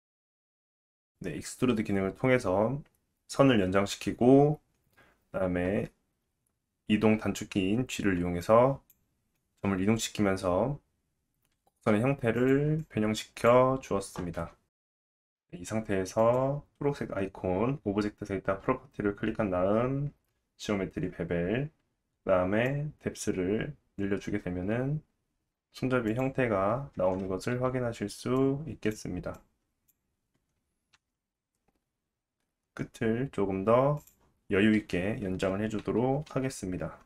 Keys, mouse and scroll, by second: 0.0-1.1 typing, 0.2 click, 1.3 click, 1.6 Tab, 1.8 Tab, 2.0 click, 2.1-4.9 typing, 2.4 click, 2.7-4.4 drag, 4.4 Tab, 4.4 middle click, 4.7 Tab, 4.7 click, 5.4 middle click, 5.5 Tab, 5.6 Tab, 5.7 click, 5.9-8.1 typing, 6.1 middle click, 6.5 middle click, 6.6 Tab, 6.9 Tab, 7.0 click, 7.6 click, 8.0 click, 8.4 Tab, 8.4-10.8 middle drag, 10.8-12.1 drag, 11.4 g, 11.9 g, 12.1 middle click, 12.2 Tab, 12.6 Tab, 12.7 click, 13.2 e, 13.5 click, 13.6 g, 13.9 click, 13.9 g, 14.3 ctrl+z, 14.4 ctrl+z, 14.5 ctrl+z, 14.8 Tab, 15.5-18.7 drag, 20.4-22.7 scroll down 2, 22.7-25.5 drag, 25.5 Tab, 26.1 click, 26.9 Tab, 28.4-34.1 drag, 31.0 e, 36.3 alt+z.